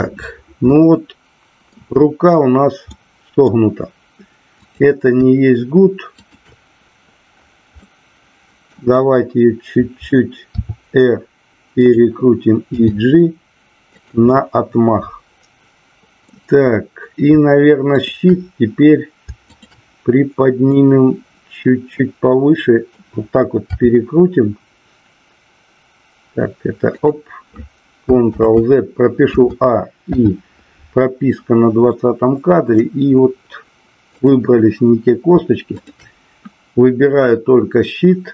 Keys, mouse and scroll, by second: 0.7-1.6 middle drag, 2.9-3.4 middle drag, 4.5-5.4 drag, 6.3 shift+click, 7.8-8.7 middle drag, 10.5 r, 11.8 click, 12.8 g, 14.3-16.3 middle drag, 19.4-20.3 shift+drag, 20.7-23.0 middle drag, 23.7 r, 26.9 click, 28.3 ctrl+z, 29.2 a, 30.1 i, 31.9-32.7 middle drag, 34.2-34.9 drag, 35.7 shift+click.